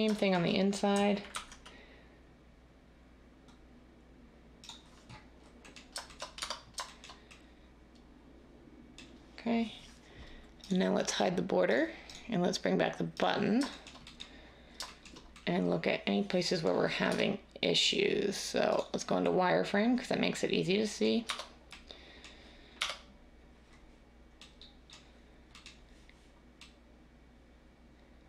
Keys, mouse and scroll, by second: 1.3 ctrl+b, 6.4 Tab, 17.0 Tab, 21.2 Tab, 22.7 1.